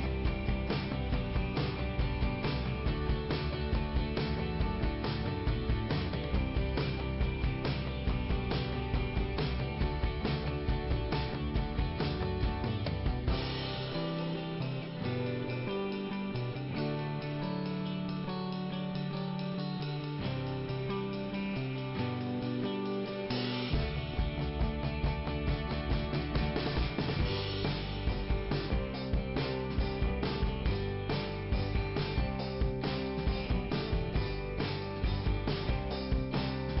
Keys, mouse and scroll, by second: 0.9 click, 1.0 click, 3.0 scroll up 1, 4.0 scroll up 1, 6.6 click, 7.4 click, 9.1 click, 9.4 right click, 9.5 double right click, 10.3 click, 10.6 click, 10.8 double click, 12.9 scroll down 2, 15.2-16.1 typing, 16.2-16.7 scroll down 2, 18.3 scroll up 2, 19.0 scroll down 2, 20.1 scroll up 1, 22.9 click, 23.5 i, 24.2 scroll down 2, 25.3 click, 26.5 click, 27.3 p, 29.8 scroll up 2, 30.4 click, 30.6 right click, 30.8 double right click, 32.3 click, 33.4 click, 34.4 click, 35.8 click, 36.7 click.